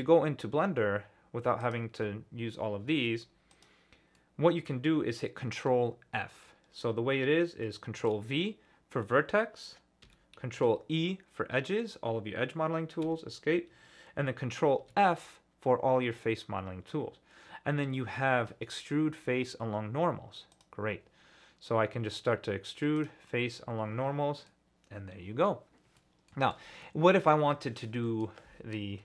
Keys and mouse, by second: 1.6-3.6 drag, 4.1 click, 8.0 ctrl+v, 10.6 ctrl+e, 14.8 ctrl+f, 23.0 click, 23.3-24.5 middle drag, 26.0 middle click, 26.4 ctrl+z, 26.8 click, 27.8 click.